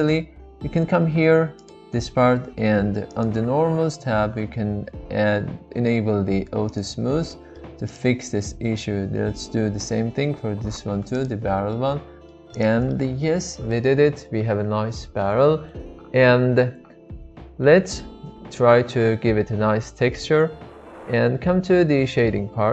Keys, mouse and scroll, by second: 1.5-3.0 drag, 3.1 click, 6.7 click, 7.3-7.6 middle drag, 7.8 click, 8.2 middle click, 11.1 click, 11.7-13.3 middle drag, 14.5-16.7 middle drag, 17.9-19.0 middle drag.